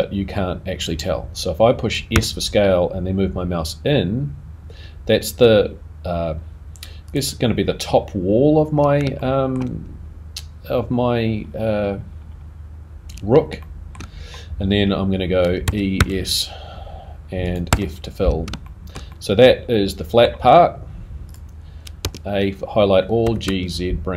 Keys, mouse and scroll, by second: 9.2 shift+middle click, 13.6 shift+middle click, 18.7 shift+middle click, 18.7 shift+f, 19.1 middle click, 21.3 click.